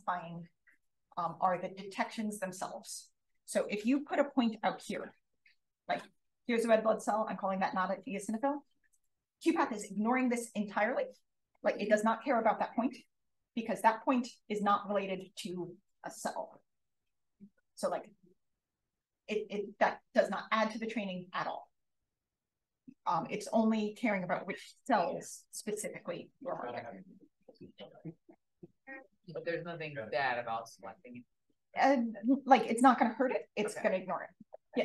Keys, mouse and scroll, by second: 4.8 click, 32.6 alt+click.